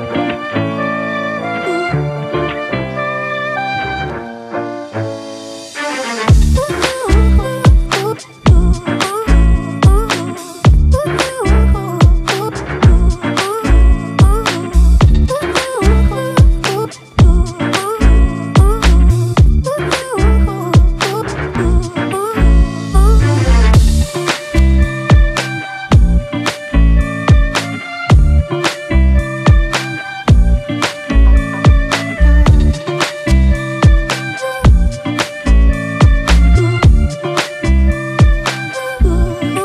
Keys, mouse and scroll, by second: 5.6 double click, 9.7-11.5 typing, 13.0-13.6 typing, 13.9 double click.